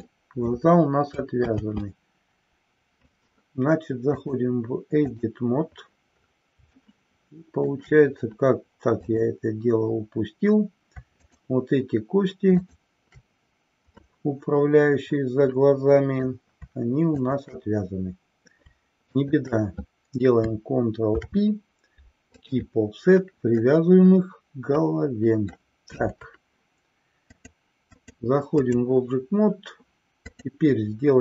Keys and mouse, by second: 2.1 ctrl+z, 4.1-5.8 drag, 6.9-7.8 shift+middle drag, 9.1-10.5 drag, 11.4 shift+click, 12.6 shift+click, 14.2-16.5 middle drag, 17.2 shift+click, 19.2 shift+click, 21.2 ctrl+p, 23.8-25.9 middle drag, 27.2 click, 28.0-29.4 drag, 30.4 click.